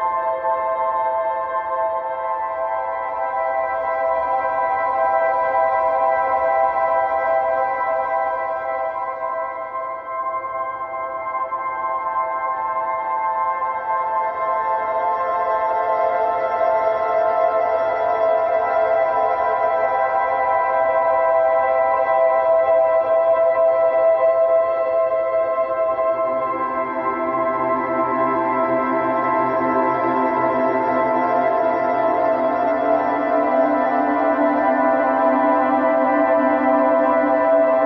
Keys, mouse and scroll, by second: 0.3 click, 1.1 g, 3.2-5.1 middle drag, 5.1 scroll down 1, 5.3 shift+middle click, 5.9-7.3 drag, 7.3 shift+a, 9.1 s, 10.1 middle click, 10.9 g, 13.1-14.7 drag, 15.6 s, 16.8 s, 19.5-21.3 middle drag, 21.3 click, 22.2 g, 23.9-24.9 middle drag, 24.9 g, 26.2-27.2 middle drag, 27.2-27.6 scroll up 2, 27.6 middle click, 28.5 s, 29.4-31.1 middle drag, 31.1 s, 32.8 g, 34.6-35.9 middle drag, 35.9 ctrl+r, 37.7 click.